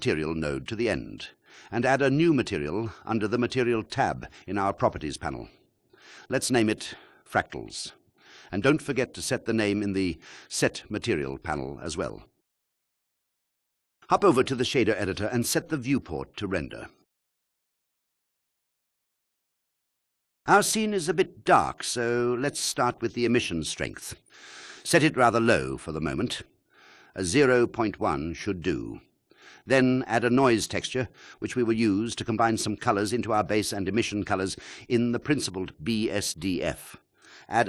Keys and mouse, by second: 0.7 click, 3.1 click, 5.3-7.4 drag, 7.1 BackSpace, 8.6 shift+BackSpace, 11.1 middle click, 12.5 click, 12.8 click, 13.8 click, 14.6-15.0 drag, 16.6 click, 20.7 shift+click, 22.0 shift+click, 22.9 click, 24.2 click, 34.7 shift+a.